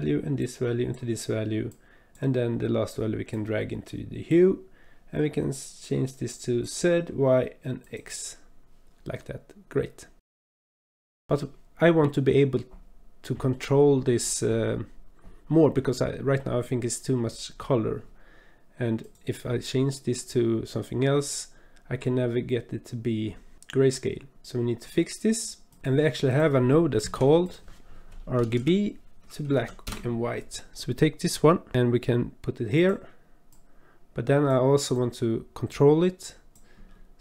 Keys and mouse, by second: 0.4-1.0 drag, 1.7 click, 3.3-4.4 drag, 6.4 click, 7.8 click, 9.3-10.2 drag, 10.4 click, 10.9 click, 11.1 click, 11.3-13.5 drag, 19.0 click, 26.3 click, 27.0 shift+a, 33.5 click, 33.6-34.8 drag, 34.9-36.5 drag.